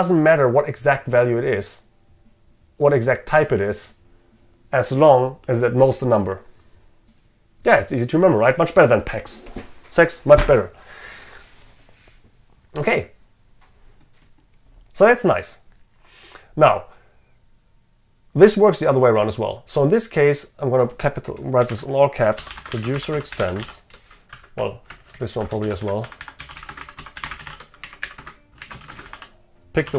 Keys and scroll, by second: 25.1 ctrl+shift+Left.